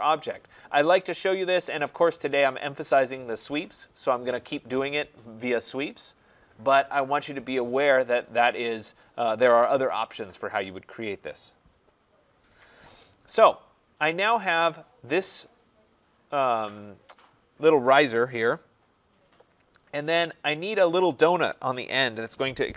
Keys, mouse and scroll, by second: 9.0 click, 12.4 Delete, 13.5 scroll, 14.7 click.